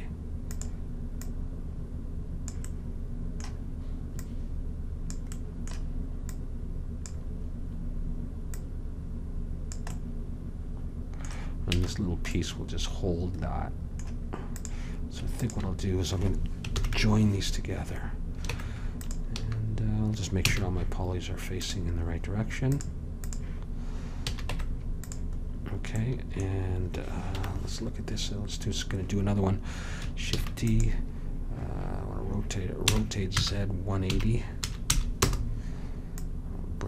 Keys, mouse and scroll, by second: 1.2-3.1 drag, 2.8 middle click, 4.2-8.3 drag, 5.4 middle click, 8.6-10.4 drag, 10.0-11.9 middle drag, 11.9 a, 14.6-16.9 drag, 16.9 ctrl+j, 18.6 Tab, 19.5 a, 20.5 a, 24.4 a, 24.6 Tab, 27.5 KP_1, 30.4 shift+d, 33.0 r, 36.3-36.8 drag.